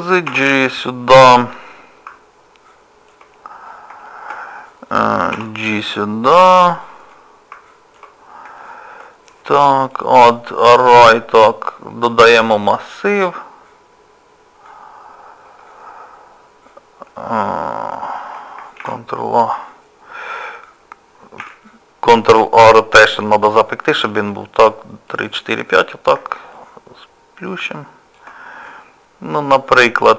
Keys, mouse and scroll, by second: 0.3 g, 1.5 middle click, 3.4 scroll up 2, 3.9 scroll up 2, 4.1 shift+middle click, 5.3 g, 7.1 middle click, 8.2 scroll down 2, 8.6 shift+middle click, 9.9 click, 15.5 Tab, 20.6 shift+a, 21.4 shift+a, 25.1 click, 25.3 click, 26.2 click, 26.6 shift+click, 26.8 shift+click, 28.7 middle click.